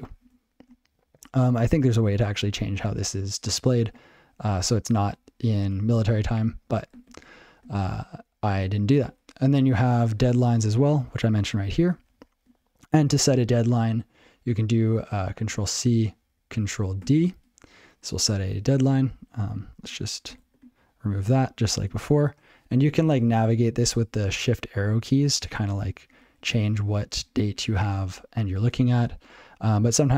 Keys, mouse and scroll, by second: 6.3 alt+b, 10.2 ctrl+a, 10.8 ctrl+a, 11.0 alt+f, 12.0 ctrl+a, 12.1 alt+f, 17.0 ctrl+d, 19.4 o.